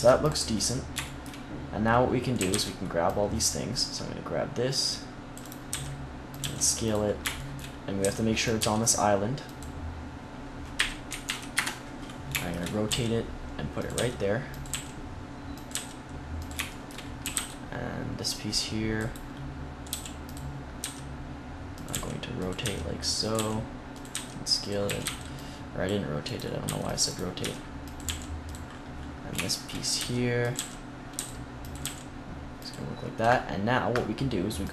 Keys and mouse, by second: 2.3 a, 2.4 c, 5.5 right click, 5.7 s, 6.3 g, 7.2 click, 7.9 s, 8.5 g, 10.6 r, 12.8 g, 13.8 click, 13.8 s, 14.6 g, 15.6 s, 17.1 a, 17.2 c, 18.1 click, 18.9 click, 19.8 click, 19.8 g, 20.7 s, 21.7 click, 21.8-24.9 typing, 26.4 middle click, 26.5 c, 27.3 s, 27.9 g, 29.2 click, 29.9 s, 30.0 click, 30.4-31.4 drag, 30.4 g, 31.0 s, 31.7 g, 33.1 g.